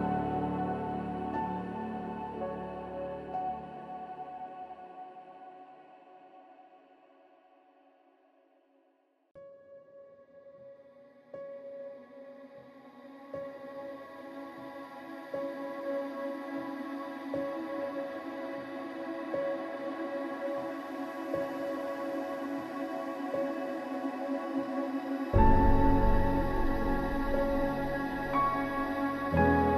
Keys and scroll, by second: 0.7 ctrl+=, 4.7 ctrl+-, 4.9 ctrl+=, 5.7 ctrl+-, 6.4 ctrl+=, 6.6 ctrl+=, 6.6 ctrl+=, 6.7 ctrl+-, 15.3 ctrl+d, 16.4 ctrl+d, 16.9 ctrl+=, 24.9 ctrl+=, 25.3 ctrl+=, 25.4 ctrl+=, 25.5 ctrl+=, 25.8 ctrl+=, 26.2 ctrl+d, 27.2 ctrl+-.